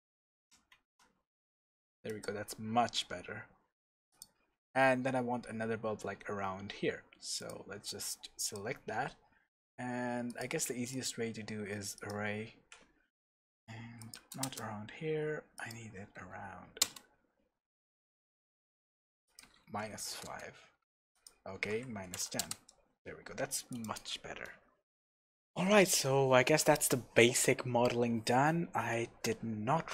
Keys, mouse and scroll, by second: 0.2-0.8 scroll down 2, 0.8 shift+z, 2.2 click, 3.3 scroll down 2, 4.1 click, 4.8-5.5 scroll down 1, 7.4 click, 8.4 click, 10.3 click, 10.9-23.8 drag, 14.5 KP_Enter, 16.9 KP_Enter, 20.3 KP_Enter, 22.5 KP_Enter, 24.6 scroll up 1, 25.1-29.9 middle drag.